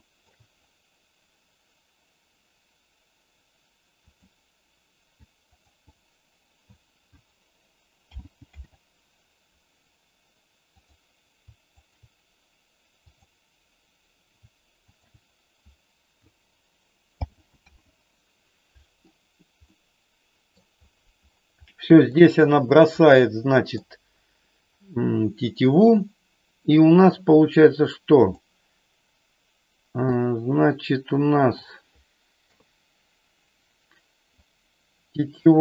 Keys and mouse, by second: 4.1 click, 5.5 alt+click, 8.0 alt+g, 8.5 alt+r, 10.8 click, 11.8 shift+click, 13.1 click, 17.1 alt+g, 17.6 alt+r, 19.8 middle click, 21.6 middle click, 23.2 middle click, 30.1-31.6 middle drag, 32.5 KP_3, 34.4-35.6 drag.